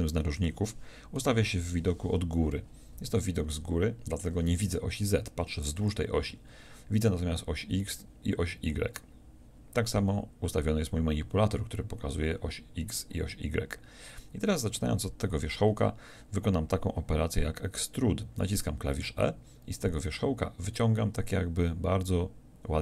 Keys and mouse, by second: 1.5 KP_7, 18.6 e.